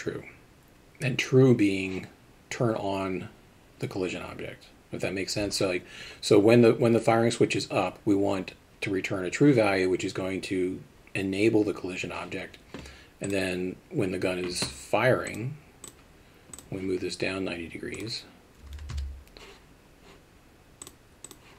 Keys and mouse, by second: 13.2 click, 15.3-15.9 drag, 17.9-19.4 drag, 20.8 click.